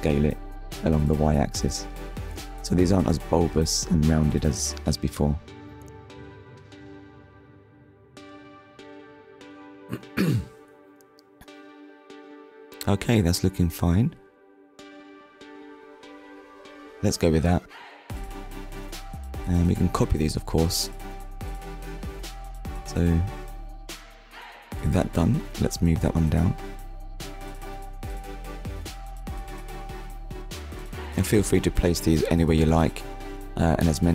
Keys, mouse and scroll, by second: 5.2 Tab, 6.8 click, 7.4 scroll down 1, 7.9 click, 8.2 scroll down 1, 8.8 middle click, 11.2-11.5 scroll down 2, 11.5 shift+middle click, 12.3 click, 14.7 KP_1, 21.5 right click, 22.8 click, 23.7 click, 31.5 click, 31.9 middle click.